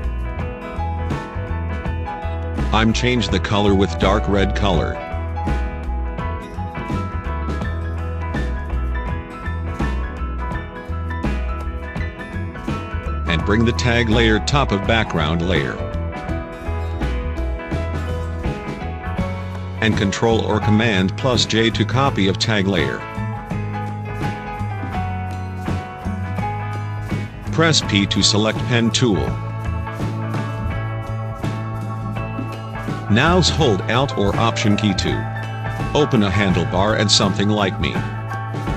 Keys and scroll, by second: 12.7 Down, 19.9 ctrl+j, 27.5 p.